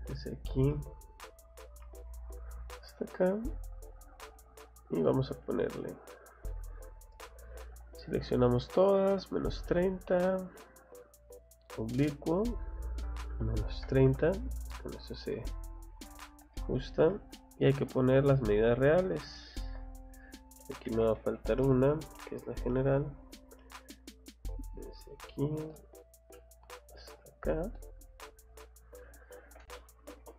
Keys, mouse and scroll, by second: 0.7 middle click, 1.2 scroll up 1, 2.2 click, 2.4 scroll down 1, 3.8 click, 4.2 scroll down 2, 4.7 scroll up 4, 5.5 click, 5.8 click, 6.1 scroll down 2, 6.7 scroll up 2, 8.0 click, 9.2 click, 10.8 click, 11.7 click, 15.2 middle click, 15.9 Escape, 16.5 middle click, 17.9 middle click, 18.4 middle click, 19.2 scroll up 1, 20.7 d, 21.3 i, 23.1 scroll up 2, 24.9 click, 25.1 scroll down 2, 25.7 middle click, 26.3 scroll up 1, 27.4 click, 27.6 scroll down 1, 28.4 click, 29.4-30.3 typing.